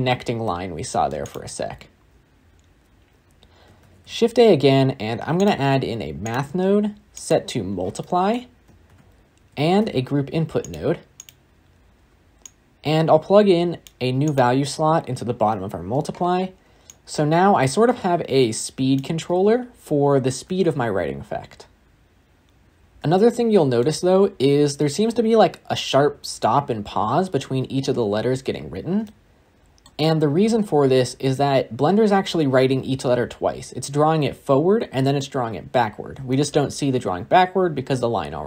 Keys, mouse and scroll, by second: 5.3 shift+a, 7.4-10.6 drag, 10.6 shift+a, 13.8 click, 16.9-19.1 drag, 19.1 space, 22.8 space, 23.0-26.1 shift+middle drag, 28.9-30.3 shift+middle drag, 30.3-32.1 scroll up 1, 36.2-38.4 shift+middle drag.